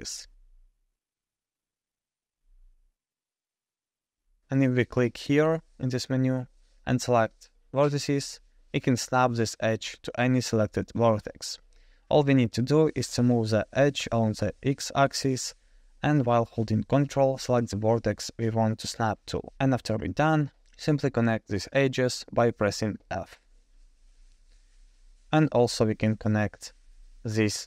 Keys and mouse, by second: 7.2-10.7 drag, 11.8 g, 17.7 shift+click, 18.6-19.7 middle drag, 20.6 click, 22.0 shift+click, 23.4 f, 24.1-24.7 middle drag, 26.7 alt+click.